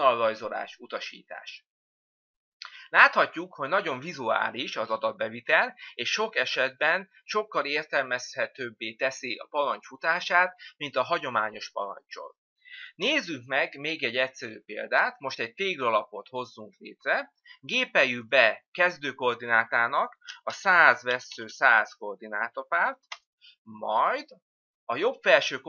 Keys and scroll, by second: 13.5 Delete, 25.4 Return.